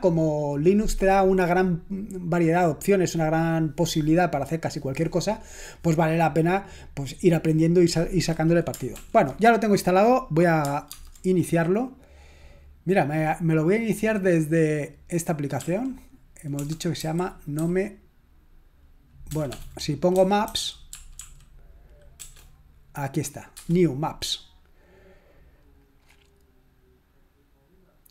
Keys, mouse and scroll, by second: 9.0 ctrl+l, 11.0 super+space, 15.6 typing, 16.8-17.6 typing, 19.3-22.2 typing, 23.8 Return.